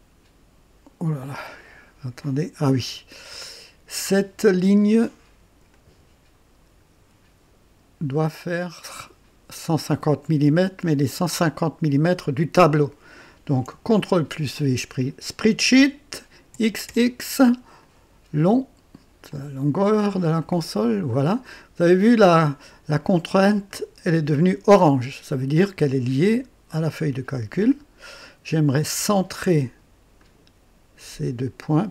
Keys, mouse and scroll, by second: 5.7 click, 9.0 click, 12.0 click, 14.2 ctrl+v, 14.2 ctrl+v, 16.5 x, 16.8 x, 17.8 click, 19.3 click, 20.4 click, 21.9-22.3 scroll down 1, 22.4 right click, 23.7-25.0 drag, 26.9-28.7 drag, 30.1 click.